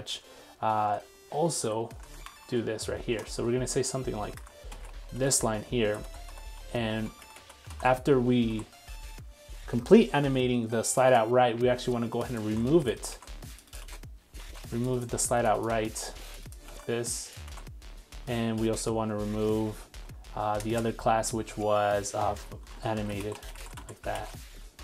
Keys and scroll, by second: 7.7 super+s, 12.5 super+c, 13.1 super+c, 14.4 super+z, 16.6 super+z, 16.8 super+c, 17.6 super+v, 24.2 super+s.